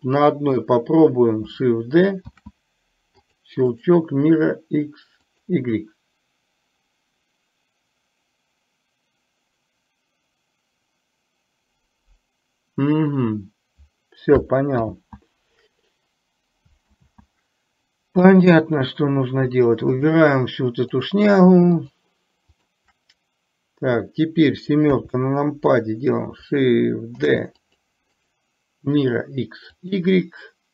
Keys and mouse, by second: 0.1 middle click, 2.5 shift+d, 3.7-5.6 right drag, 15.0 ctrl+z, 17.1 ctrl+z, 20.1 click, 21.1 click, 21.8-22.2 shift+drag, 22.6 shift+click, 27.3 shift+d, 28.2-30.1 right drag.